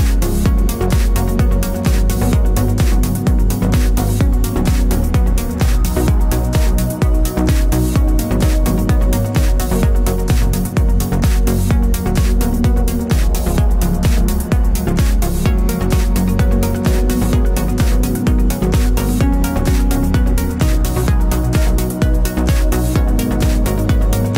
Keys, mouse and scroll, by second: 1.7 alt+shift+click, 2.4 t, 3.4 click, 4.5-10.8 typing, 11.9 click, 12.5 KP_1, 12.7 KP_8, 12.9 KP_Enter, 15.6 click, 17.3 KP_5, 17.5 KP_0, 17.9 KP_Enter, 19.2 click, 20.1 KP_7, 20.4 KP_5, 20.6 KP_Enter, 23.5 click, 24.1 KP_1, 24.2 KP_0.